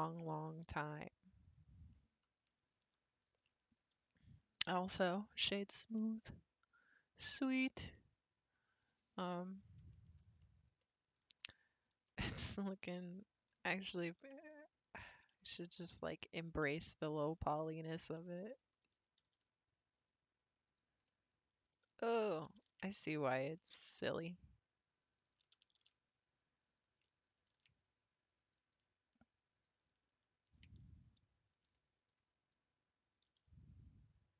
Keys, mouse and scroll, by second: 0.8 middle click, 1.5-1.9 scroll down 7, 1.9 middle click, 2.8 Tab, 3.1-3.5 scroll up 4, 3.5-4.0 middle drag, 4.0-6.0 right drag, 6.0-13.0 middle drag, 13.0 Tab, 13.7-14.8 scroll up 3, 14.8 alt+click, 15.5 middle click, 16.4 click, 17.5 ctrl+click, 18.2 shift+middle click, 18.6 scroll up 2, 19.2 g, 21.1 middle click, 21.7 scroll down 2, 22.6 ctrl+z, 23.0 middle click, 23.8 ctrl+r, 25.8 ctrl+r, 27.5 ctrl+r, 29.6 click, 30.4 ctrl+click, 31.7 middle click, 32.2 scroll up 3, 32.5-33.3 scroll down 1, 33.3 g.